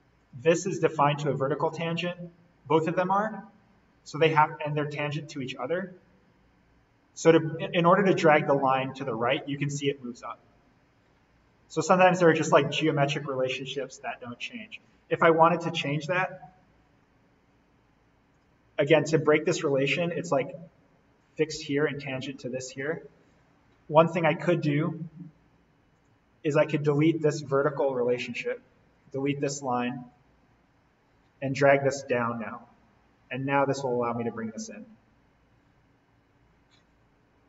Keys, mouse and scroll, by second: 1.7-2.7 scroll up 1, 4.7-14.5 drag, 14.5-15.8 scroll down 1, 15.8 click, 16.8-17.3 scroll up 1, 17.3-18.3 scroll down 1, 18.3 click, 18.7-21.1 scroll down 1, 21.1 click, 22.2-23.5 scroll up 1, 25.9 click, 26.8 Delete, 28.7 scroll down 1, 28.9 click, 29.1 Delete, 30.0-31.6 drag, 31.6 scroll up 1, 33.6-37.2 drag, 37.2-37.4 scroll down 1.